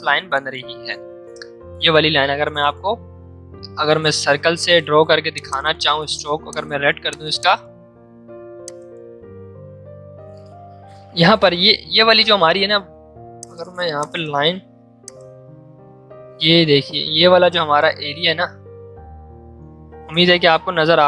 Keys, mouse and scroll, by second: 4.5 click, 10.7 v, 13.3-19.1 drag, 19.1 c, 19.6 ctrl+z.